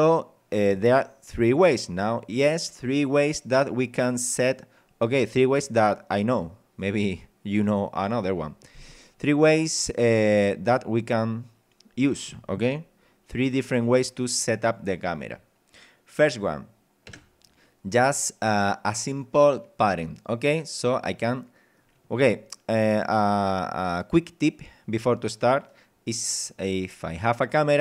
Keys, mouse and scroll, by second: 17.1 KP_0, 18.1 scroll up 2, 20.9-21.9 middle drag, 22.1-22.5 scroll up 2, 26.2 middle click, 27.0 scroll up 2.